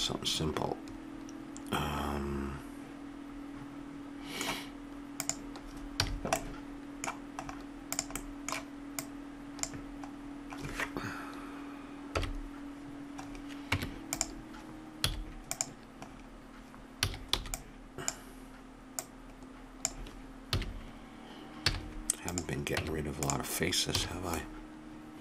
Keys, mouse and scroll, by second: 0.0-1.5 middle drag, 1.6 middle click, 1.8 middle click, 5.2 click, 6.0 a, 6.0-7.4 middle drag, 7.9 right click, 8.3 middle click, 8.5-10.8 drag, 12.2 KP_1, 13.7 Tab, 15.0 z, 17.0 a, 17.4 b, 19.0-20.7 drag, 21.7 z, 22.8 Tab, 23.9 a, 24.2 middle click.